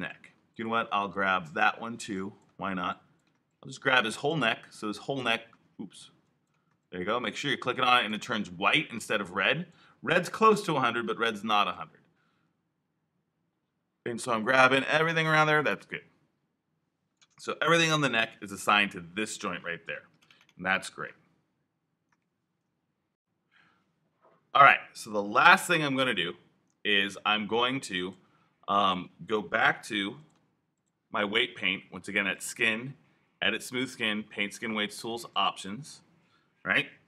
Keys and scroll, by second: 29.8 q.